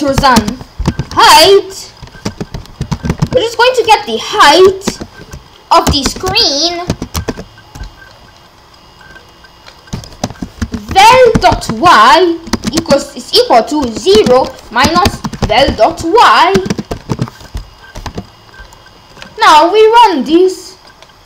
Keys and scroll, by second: 0.0-3.7 typing, 4.9 shift+0, 6.9 Return, 7.3 shift+], 10.2 Return, 10.4-12.8 typing, 13.8-18.1 typing.